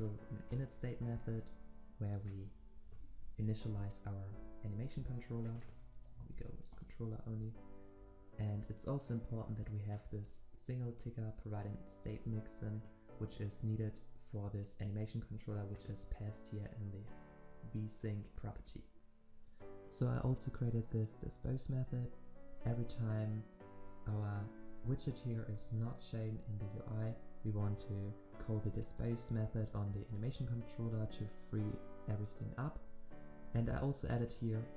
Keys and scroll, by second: 3.1 ctrl+v, 6.7 Return.